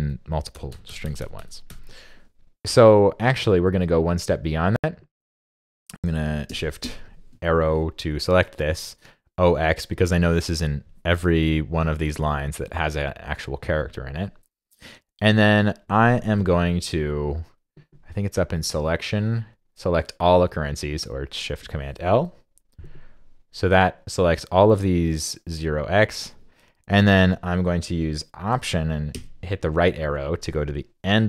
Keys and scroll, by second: 29.1 alt+Right.